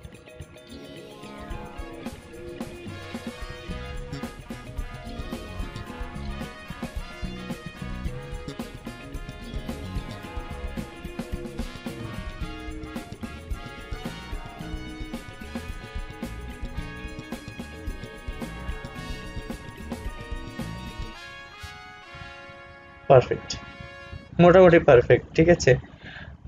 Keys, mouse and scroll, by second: 5.4 scroll down 1, 6.9-23.2 drag, 23.2 scroll up 1.